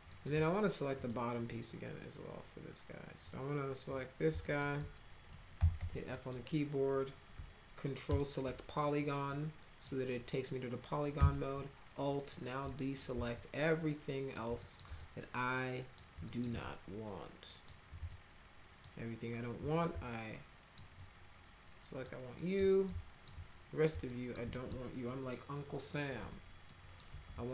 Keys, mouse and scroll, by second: 0.1 alt+middle click, 1.0 click, 3.2 click, 3.9 click, 4.4 alt+middle click, 4.8 middle click, 5.3-6.3 typing, 6.1 middle drag, 8.1 ctrl+click, 9.3 middle click, 11.5 alt+click, 12.7 middle click, 13.3-14.3 alt+drag, 14.6 middle click, 15.0 alt+click, 16.3 middle click, 16.6-17.6 alt+drag, 18.1 alt+click, 19.8 alt+middle click, 21.0-22.0 alt+drag, 22.4 alt+middle click, 22.9 alt+middle click, 24.1 alt+middle click, 24.5 middle click, 26.2 Delete, 26.7 middle click.